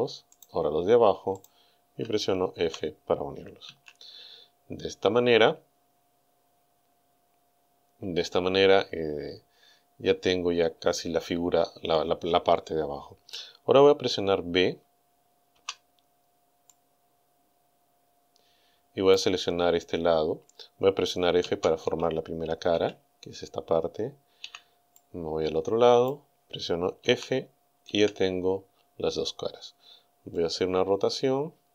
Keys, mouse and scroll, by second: 0.4 right click, 1.4 shift+right click, 2.6 f, 3.7 a, 15.6 b, 16.7-19.3 drag, 21.5 f, 22.7 a, 24.5 b, 25.0-26.3 drag, 27.1 f, 28.0 a, 30.3 scroll up 2, 30.4-31.7 middle drag.